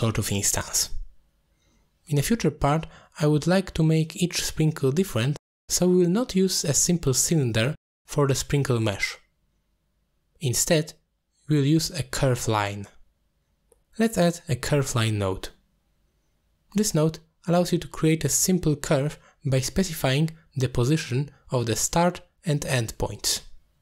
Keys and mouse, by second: 2.4 middle click, 3.6 middle click, 7.2 drag, 7.9 g, 9.0 drag, 9.3 middle click, 10.6 click, 11.2 click, 11.5 shift+a, 16.6 alt+shift+click, 17.8 shift+middle drag, 19.3-19.6 middle drag, 19.8-20.2 shift+middle drag, 22.0 shift+click, 23.5 shift+click.